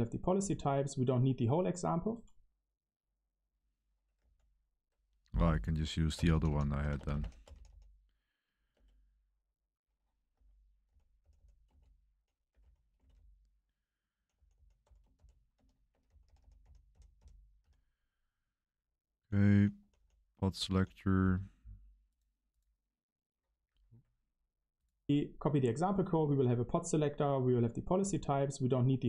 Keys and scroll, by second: 4.1 BackSpace, 6.1-7.5 typing, 8.7 Return, 8.7 typing, 10.3-20.6 typing, 23.6 Escape, 24.2 Escape.